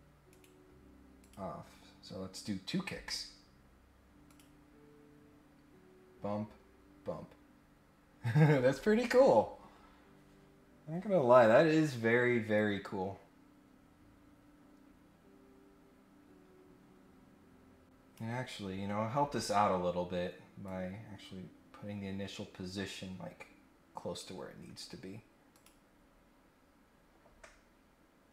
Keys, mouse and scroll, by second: 0.3 right click, 1.2 click, 4.2 click, 12.5-18.1 drag, 19.5-19.8 scroll down 1, 19.8 scroll up 1, 20.6-24.2 drag, 25.5 click.